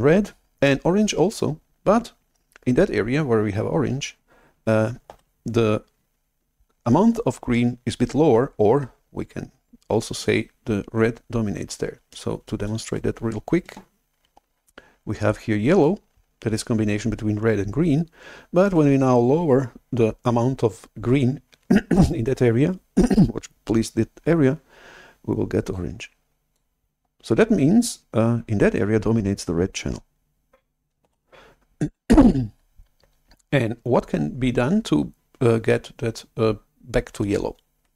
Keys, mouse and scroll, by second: 13.0 alt+Tab, 18.8 shift+super+F11, 25.7 click, 31.1 shift+super+F11.